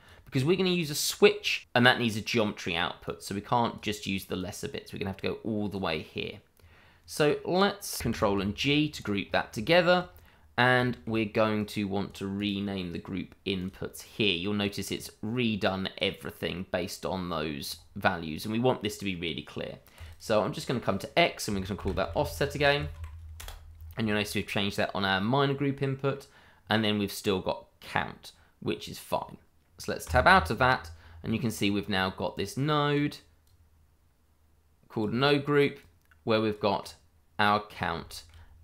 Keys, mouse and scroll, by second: 1.4-2.1 scroll down 1, 2.1 shift+middle click, 3.0 click, 4.4 click, 5.7 click, 8.1 ctrl+g, 9.2-9.6 scroll up 1, 9.7 shift+middle click, 10.0-10.7 shift+scroll up 1, 10.8 shift+middle click, 10.9 middle click, 11.0 shift+middle click, 11.5 click, 15.0 click, 19.9 click, 20.2 double click, 21.7-22.9 typing, 23.3 Return, 30.0 Tab, 30.7-31.2 scroll down 1, 31.6-32.3 scroll up 1, 32.3 click, 36.8-37.9 scroll up 1, 38.2 shift+middle click.